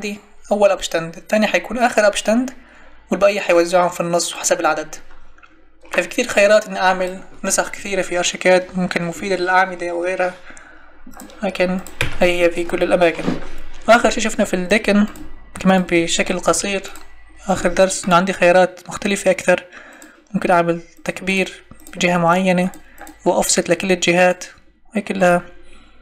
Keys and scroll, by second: 11.9 Delete, 16.5 Escape.